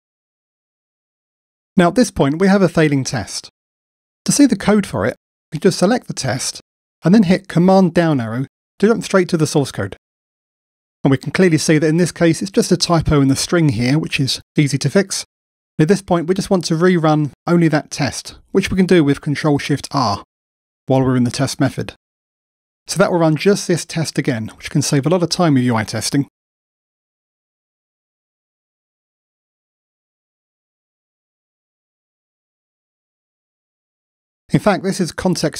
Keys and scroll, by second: 7.7 super+Down, 13.8 alt+Return, 14.5 alt+Return, 19.1 Return, 19.2 ctrl+shift+r.